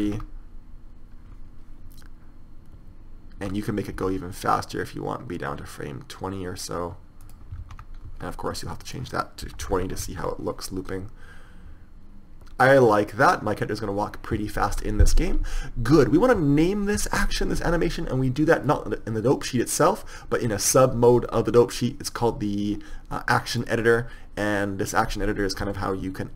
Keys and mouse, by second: 0.5 alt+a, 3.7 Escape, 4.3 s, 8.0 alt+a, 8.4 Escape, 10.4 alt+a, 15.1 Escape.